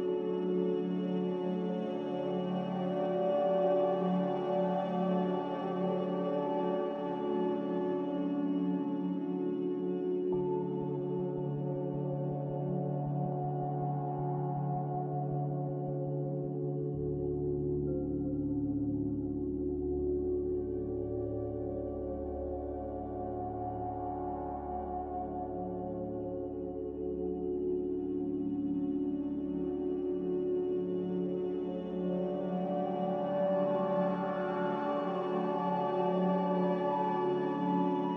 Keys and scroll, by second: 3.1 s, 4.8 5, 5.7 Tab, 8.5 typing, 10.7 BackSpace, 11.1 0, 11.4 Return, 31.2 n, 32.6 a, 34.5 3, 34.6 Return, 36.5-38.1 typing.